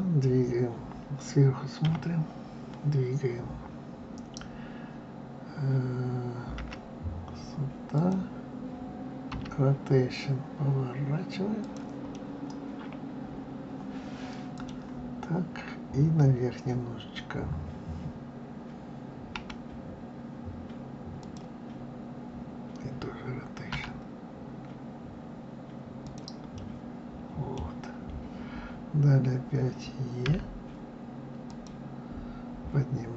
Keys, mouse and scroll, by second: 1.7 KP_7, 6.5 g, 9.3 r, 12.1-15.1 middle drag, 19.4 g, 23.7 r, 26.5-29.6 middle drag, 30.2 e.